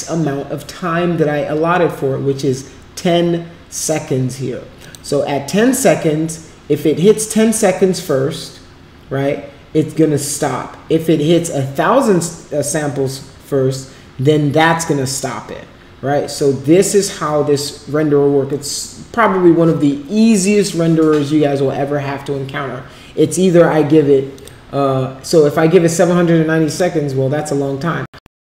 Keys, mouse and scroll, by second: 4.8 click, 26.7 click.